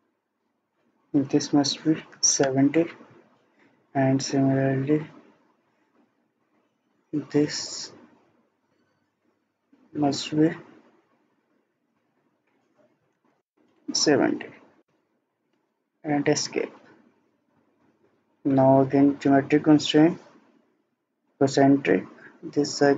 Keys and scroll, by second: 1.8-2.6 typing, 13.0 typing, 13.5 Return, 14.9 Return, 15.9 Escape.